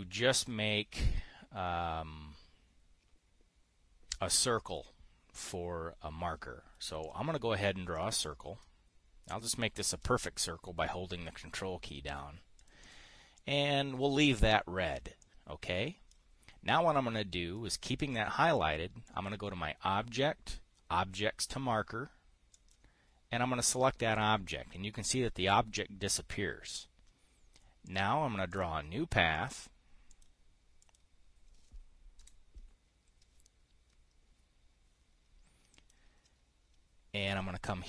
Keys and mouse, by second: 7.6 click, 8.5-12.5 ctrl+drag, 13.1 click, 13.4 click, 13.9 click, 15.7-16.7 drag, 19.6 click, 23.1 click, 28.4 click, 29.0 click, 29.8 click, 30.6 click, 31.3 click, 32.7 Return, 36.2 click, 36.5-37.8 middle drag, 37.8 click.